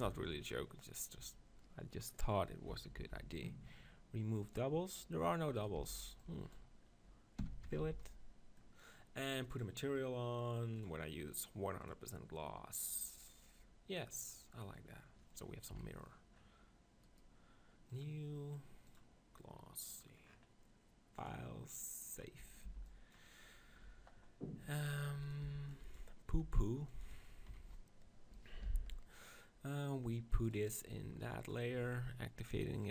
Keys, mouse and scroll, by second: 0.0 b, 3.0 ctrl+l, 4.4-6.2 drag, 5.6-7.4 right drag, 5.8 b, 7.4 f, 7.6 Tab, 7.8 z, 8.0-9.6 middle drag, 9.6-14.0 drag, 14.3 middle click, 15.7 KP_1, 20.0 click, 20.8 middle click, 21.3-23.0 drag, 22.6 b, 24.9 right click, 25.5 b, 26.3 s, 27.5 KP_7, 28.6 m, 32.8-32.9 drag.